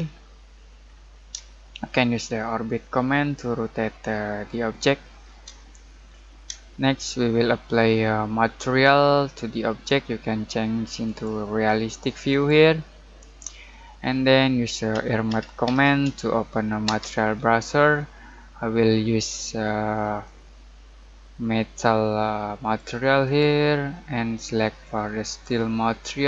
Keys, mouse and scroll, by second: 0.0-1.3 scroll down 1, 1.6 shift+middle click, 11.0 click, 14.6-16.8 typing, 20.2-26.2 drag, 20.5 typing.